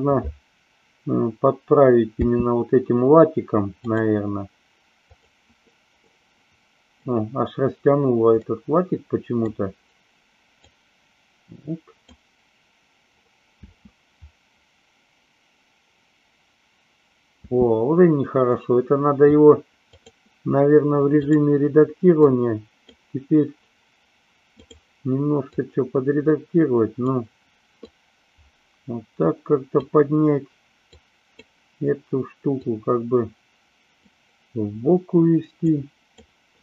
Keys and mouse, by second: 2.1 space, 3.9 click, 5.1 click, 5.9-7.0 middle drag, 8.4-9.4 middle drag, 10.7-12.0 drag, 13.5 space, 17.4 space, 19.9-21.4 drag, 22.1 click, 25.5-27.0 drag, 27.8-29.8 drag, 31.0 click, 32.7-34.0 drag, 35.7 click.